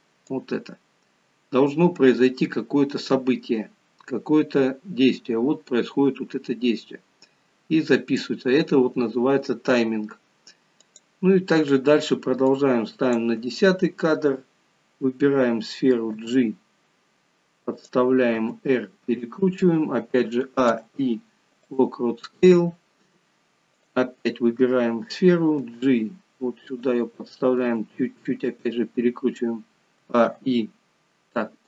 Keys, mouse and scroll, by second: 0.5 click, 10.9 click, 12.6 click, 16.2 g, 20.4 a, 21.0 i, 23.9 click, 25.6 g, 30.0 a.